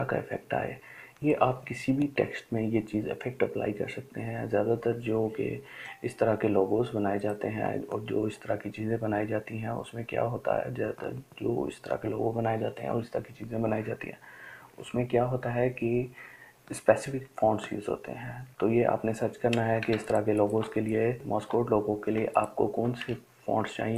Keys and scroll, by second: 21.1 ctrl+space, 21.7 ctrl+space, 22.4 ctrl+space.